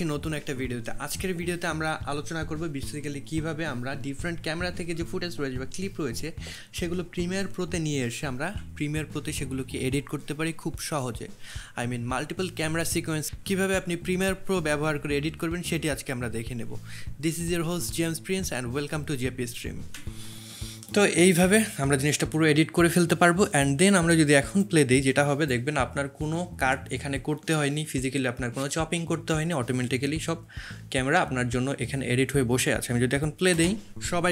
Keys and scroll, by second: 1.8 2, 8.5 1, 13.8 2, 16.7 1, 20.0 space, 33.5 space.